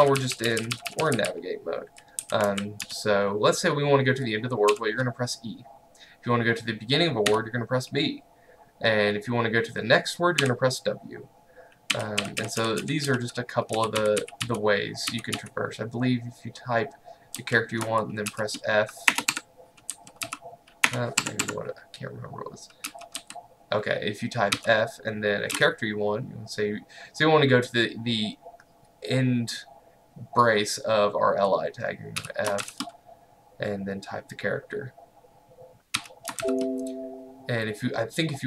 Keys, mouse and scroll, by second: 0.0-3.4 typing, 4.7 typing, 7.3 typing, 10.5 typing, 12.0-15.4 typing, 18.3-20.9 typing, 19.3 Escape, 21.3 Escape, 22.9 typing, 24.6-25.6 typing, 32.2 f, 32.7 shift+., 36.0 f, 36.5 shift+..